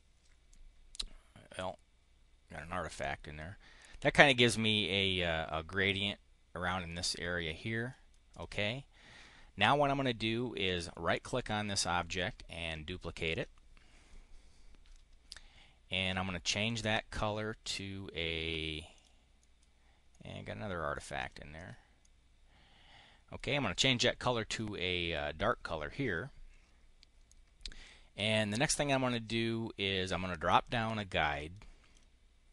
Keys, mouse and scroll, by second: 1.2-2.9 drag, 6.3 click, 7.4 click, 8.0 click, 10.4 click, 12.0 click, 13.2 click, 16.6 click, 17.4 click, 18.8 click, 19.3 middle click, 19.8 middle click, 20.4 click, 20.8 click, 21.5-23.2 middle drag, 30.5-31.8 drag.